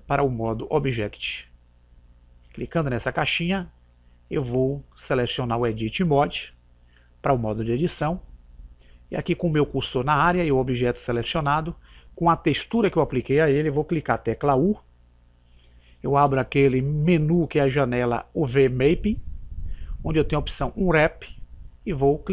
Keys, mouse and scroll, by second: 2.2 click, 3.8 typing, 7.7 typing, 15.3 u.